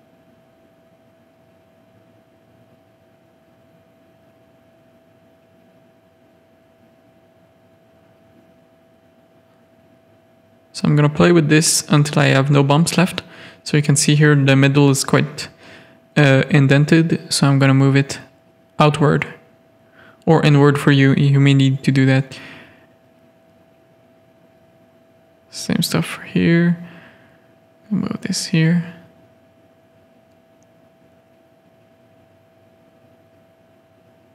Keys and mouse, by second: 0.1-1.1 drag, 1.8-4.1 middle drag, 4.7 middle click, 5.9 shift+middle click, 6.7 g, 8.2 Tab, 8.5-11.1 middle drag, 11.6 Tab, 11.9 middle click, 13.6 middle click, 14.8-17.8 drag, 18.4-19.7 drag, 19.8 Tab, 20.4-21.9 middle drag, 22.0 Tab, 22.2 middle click, 22.8 click, 23.6 ctrl+click, 24.1 click, 24.4 shift+click, 24.7 g, 25.7 shift+click, 26.0 g, 28.6 KP_3, 30.6 shift+click, 30.8 g, 31.8 Tab, 32.4-34.3 middle drag.